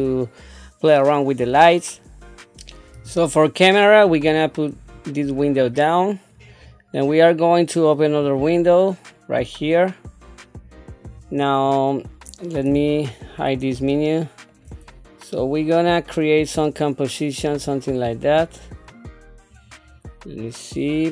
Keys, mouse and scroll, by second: 4.2 click, 4.4 click, 5.6 click, 8.2-11.1 drag, 12.7 n, 15.0 middle click, 17.5 click, 19.5 click, 20.4-20.9 scroll.